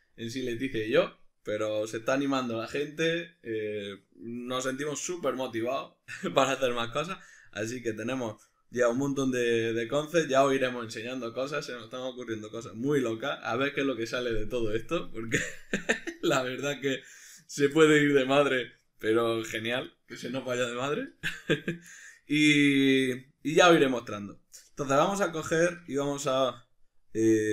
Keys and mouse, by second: 17.4 right click, 17.8-21.4 shift+middle drag, 18.3 Tab, 21.0 3, 21.4 right click, 21.9-25.0 shift+middle drag, 25.0 right click, 25.6-27.5 shift+middle drag.